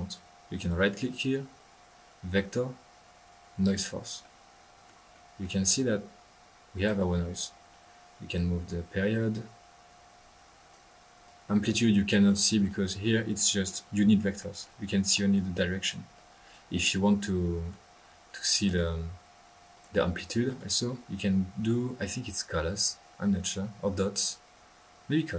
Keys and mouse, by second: 0.5 right click, 3.6 click, 5.6-7.2 drag, 7.4 right click, 8.3-10.9 drag, 11.2-12.6 drag, 12.6 ctrl+z, 13.1 ctrl+middle click, 15.5 right click, 16.1 click, 16.7-17.9 middle drag, 18.6 right click, 19.7 click, 20.4 right click.